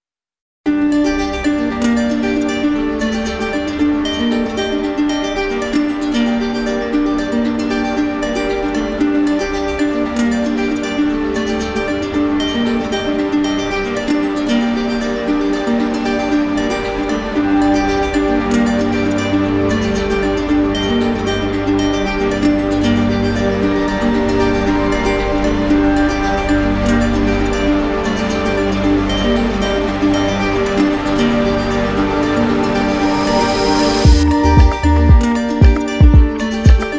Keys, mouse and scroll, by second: 1.6 click, 2.8 w, 4.7 click, 7.4 click, 7.8 q, 8.8 click, 9.3 w, 11.9 click, 13.1 click, 13.8 shift+click, 16.3 click, 24.0-25.1 drag, 28.1-29.2 drag, 32.3 click, 35.2 click, 35.9 click, 36.7 click.